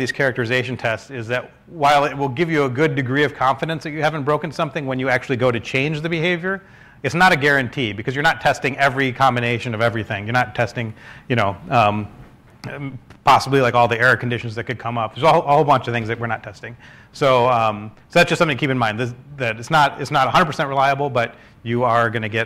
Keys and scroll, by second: 0.8-4.0 typing, 7.5 typing, 9.7-10.4 typing, 13.6-16.0 typing.